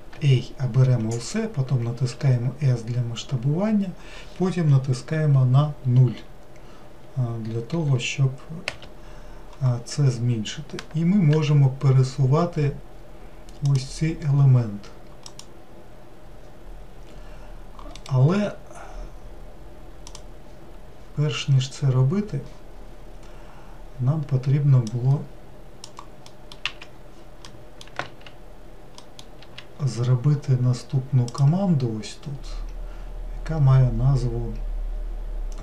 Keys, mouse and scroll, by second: 2.2 s, 11.4 g, 15.4 click, 25.1-35.6 drag.